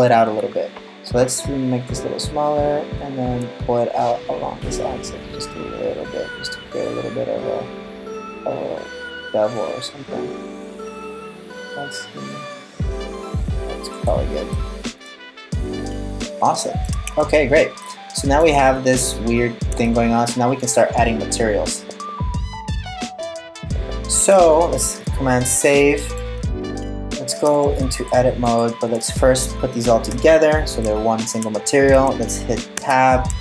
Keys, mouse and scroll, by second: 0.0-0.3 scroll down 1, 0.0 g, 14.2 middle click, 16.7 Tab, 17.2-18.2 scroll up 2, 17.4 middle click, 18.2 scroll down 4, 18.4 scroll up 4, 18.7 scroll down 1, 18.8-19.3 scroll down 3, 19.4 scroll up 1, 19.5 middle click, 24.0 super+s, 25.4 middle click, 26.5 right click, 27.6 shift+right click, 28.1 shift+right click, 29.7 super+j, 32.4 Tab, 33.1 middle click.